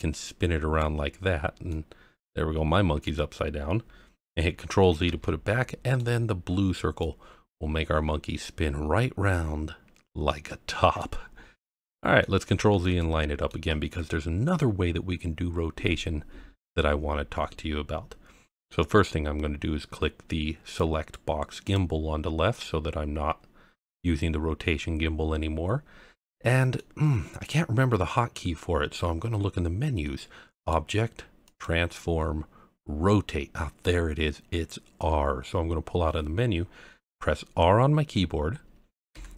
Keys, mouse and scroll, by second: 1.7-3.0 middle drag, 5.0 ctrl+z, 5.5-6.0 middle drag, 7.0 click, 11.2-11.6 scroll down 1, 11.6-12.2 middle drag, 12.7 ctrl+z, 13.0-13.5 middle drag, 20.8 click, 21.6 click, 26.2-26.8 middle drag, 27.2-27.7 scroll up 1, 28.7-29.3 scroll up 1, 30.5-35.6 drag, 38.2-38.6 scroll down 1, 39.1 r.